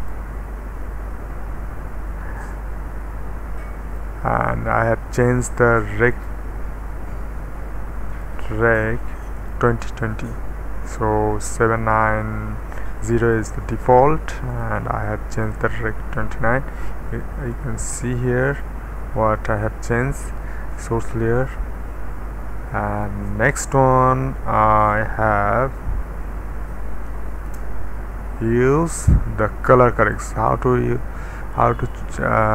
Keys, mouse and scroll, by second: 0.3 d, 1.4 d, 2.3-4.8 middle drag, 5.1 click, 6.1 click, 8.1 click, 9.3 click, 9.3-10.3 typing, 10.9 click, 13.2 click, 14.5 click, 15.3 click, 17.5-18.7 drag, 23.1 middle click, 23.8 click, 27.4 Return, 30.0-31.6 right drag.